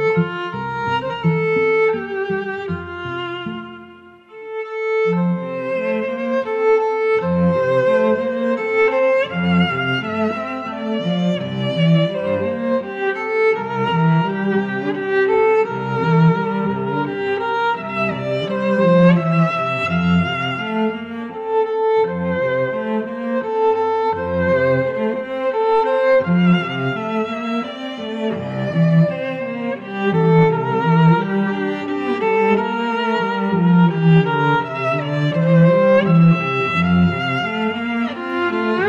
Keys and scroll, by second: 10.7 a, 18.5 Tab.